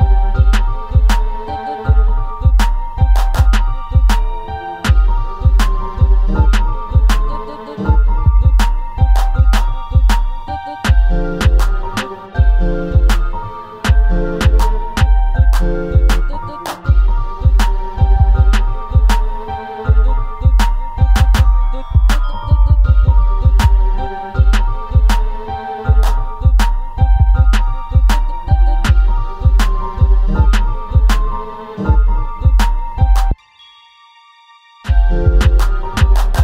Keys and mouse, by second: 1.3 Tab, 1.6 middle click, 2.4 click, 4.4 middle click, 5.5 middle click, 7.3 click, 8.7 ctrl+z, 9.5 click, 10.5-11.7 middle drag, 12.1 ctrl+b, 15.7 click, 16.2 a, 16.6 middle click, 16.9 click, 17.9 Tab, 18.5 s, 20.4 click, 21.0 KP_7, 21.9 Tab, 22.5 a, 23.0-24.8 drag, 25.1 Tab, 25.8 ctrl+a, 27.7 click, 28.5 click, 29.8 click, 30.0 click, 33.0 shift+a.